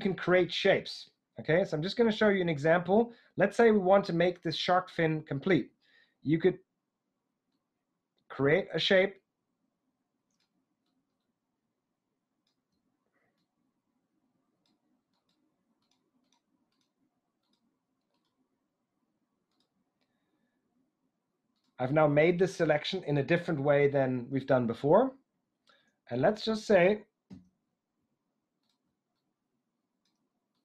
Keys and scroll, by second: 27.3 s.